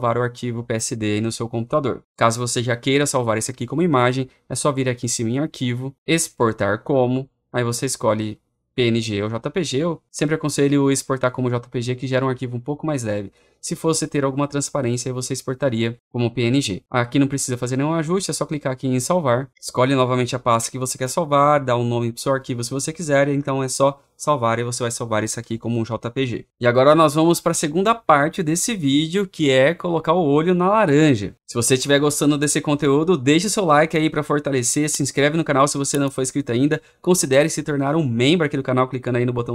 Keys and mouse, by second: 11.9-19.5 drag, 23.7 click, 24.7 click.